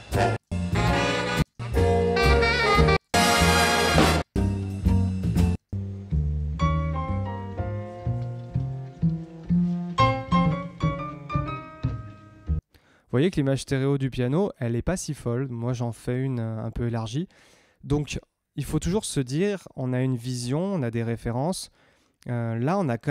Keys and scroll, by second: 0.3 space, 2.9 space, 5.5 space, 12.5 space.